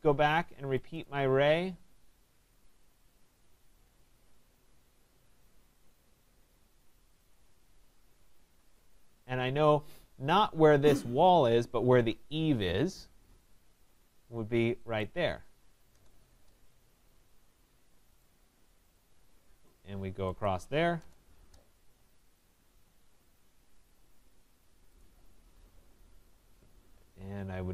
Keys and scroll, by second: 0.5 Escape, 15.9 Return, 21.0 Return, 21.8 Escape.